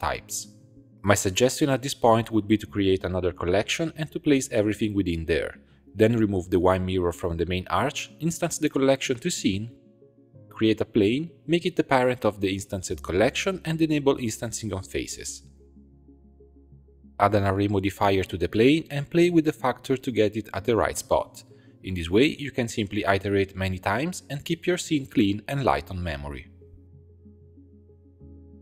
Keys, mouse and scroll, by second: 2.5-3.5 right drag, 3.6 scroll down 7, 4.0 shift+click, 4.2-4.8 scroll up 5, 4.8 click, 6.0 click, 7.0 click, 7.6-8.8 middle drag, 8.8 click, 9.3-10.5 right drag, 10.5 alt+\, 10.5 shift+a, 12.1 click, 12.7 ctrl+click, 13.4 ctrl+p, 15.0 click, 15.6 click, 16.0 click, 16.2 click, 16.7-20.0 drag, 20.0-20.9 scroll up 4, 20.9-22.9 shift+drag, 23.4-24.2 scroll down 1, 24.2 click, 25.1 click, 26.6-28.4 middle drag, 28.4 scroll up 1.